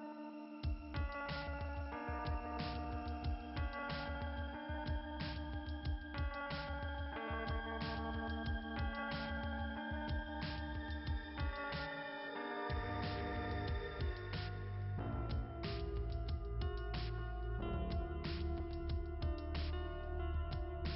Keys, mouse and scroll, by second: 3.5-8.6 typing, 8.3-8.9 scroll down 4, 13.9 click, 14.7 click, 15.2 Delete, 16.4 right click, 17.4 click, 19.2 right click.